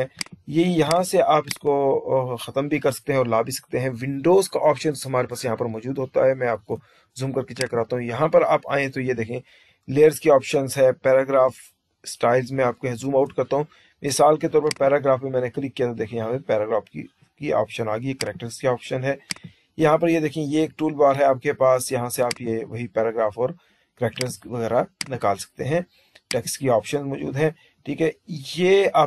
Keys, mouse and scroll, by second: 0.1 click, 0.7 click, 1.3 click, 14.5 click, 18.1 click, 19.2 click, 22.2 click, 24.0 click, 24.9 click, 26.2 click.